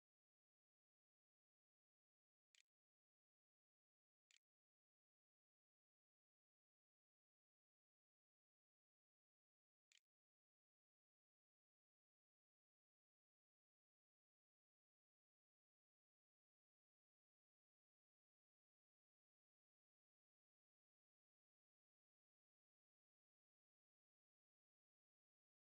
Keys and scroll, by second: 0.0-4.6 typing, 4.8 Tab, 6.4-7.3 typing, 9.2 `, 9.7 1, 11.2 `.